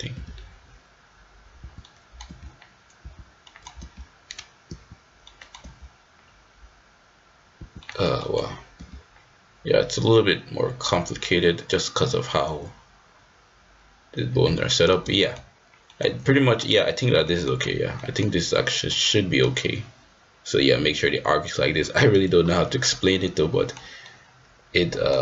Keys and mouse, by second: 0.7 g, 1.8 middle click, 2.2 g, 3.4 middle click, 3.8 g, 5.3 middle drag, 5.4 click, 5.7 g, 7.8 middle click, 8.2 middle click, 8.7 g, 14.6-14.9 middle drag, 15.2 shift+middle click, 15.9 middle click, 16.6-17.8 drag, 18.0 middle drag, 18.9-19.4 middle drag, 22.6-23.8 middle drag, 24.1-25.1 middle drag.